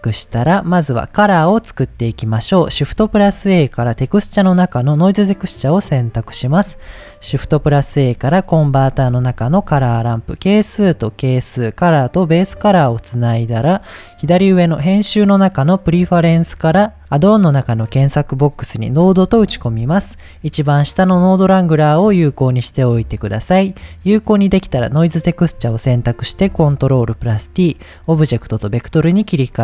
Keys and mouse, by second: 0.3 middle click, 1.9 click, 3.0 shift+a, 7.3 shift+a, 9.6 click, 10.3-11.4 drag, 12.1-12.9 drag, 14.4-17.0 drag, 24.3 click, 25.6 middle click, 26.3 ctrl+t, 26.7 middle click, 27.7-28.4 drag, 29.1 middle click.